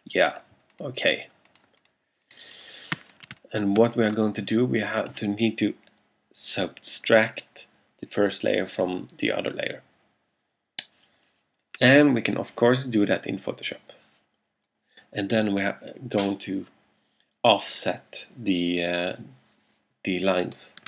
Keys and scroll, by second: 3.9 alt+space.